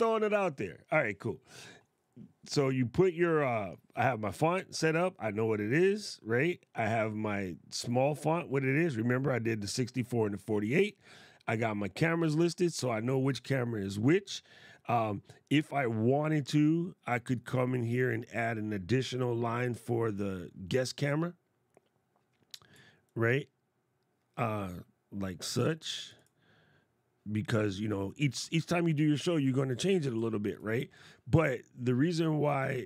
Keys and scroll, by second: 30.2 shift+f.